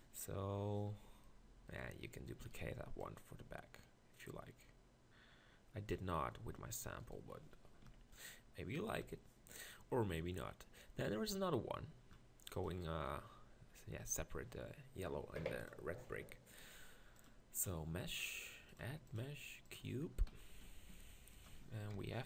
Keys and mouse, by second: 2.4 shift+d, 6.2 middle click, 7.9 ctrl+KP_Decimal, 9.0 KP_1, 20.3 z, 20.9 g, 21.9 ctrl+KP_Decimal.